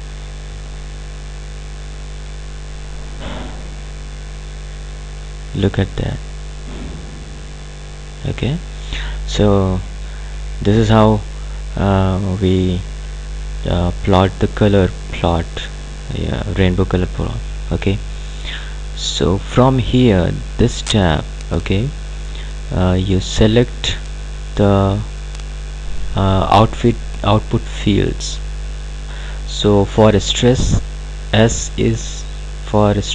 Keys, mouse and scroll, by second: 24.5 click.